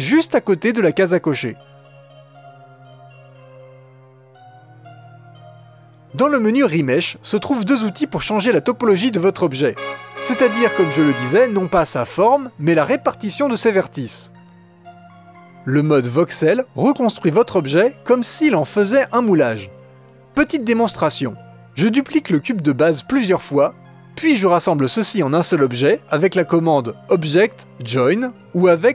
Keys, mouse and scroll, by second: 1.7-3.2 drag, 8.3 click, 8.7-10.5 scroll down 5, 21.5 click, 22.0-24.0 typing, 24.4-24.9 shift+drag, 27.2-28.9 drag.